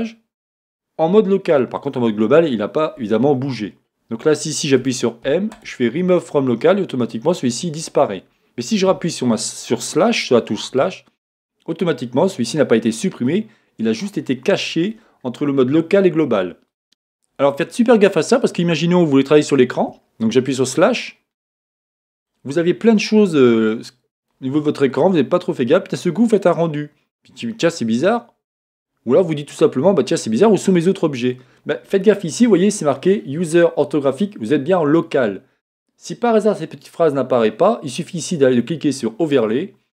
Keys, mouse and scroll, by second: 8.9 KP_Divide, 10.8-16.8 middle drag, 19.9 KP_Divide, 21.0-39.3 middle drag, 22.6-23.0 scroll down 1, 25.1-25.4 scroll up 1, 25.4-28.7 scroll down 1, 28.7-29.4 scroll up 1, 39.3-39.9 drag.